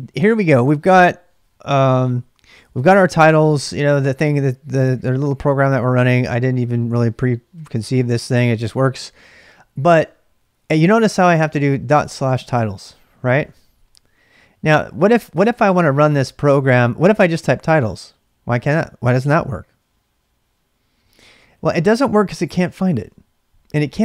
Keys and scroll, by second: 0.0-0.2 typing, 4.9-6.4 typing, 6.9 Return, 8.0-8.8 typing, 10.7-13.3 typing, 13.5 Return, 14.7-15.5 typing, 17.0-18.4 typing, 19.5-20.2 typing.